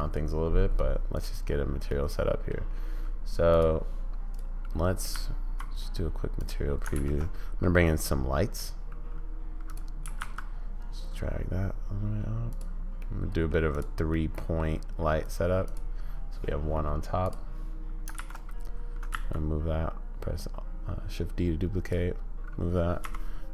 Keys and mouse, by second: 1.2 click, 1.3-2.6 middle drag, 3.6 click, 4.3 click, 5.1 z, 6.4 click, 6.9 shift+a, 10.1 g, 13.0-13.5 middle drag, 14.3 middle click, 18.2 shift+d, 23.0 r.